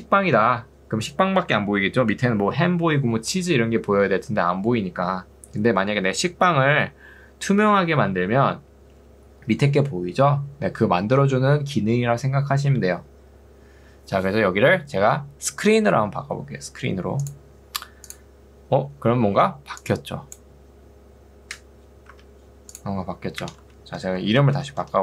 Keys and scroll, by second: 19.4 ctrl+2, 22.2 Escape, 23.6 Return, 23.8 Right, 24.1-25.0 typing.